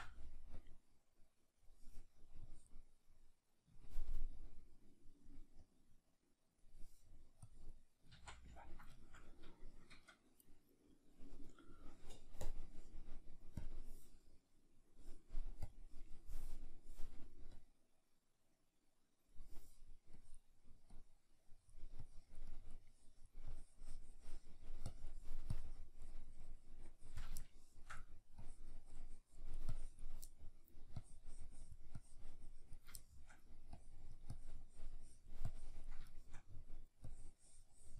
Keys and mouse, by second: 8.2 ctrl+z, 8.6-13.7 ctrl+middle drag, 13.7-27.5 drag, 27.5 shift+middle click, 28.4-30.3 drag, 30.3 middle click, 31.0-33.0 drag, 33.0 shift+middle click, 33.7-36.2 drag, 36.2 shift+middle click, 37.1-37.9 drag.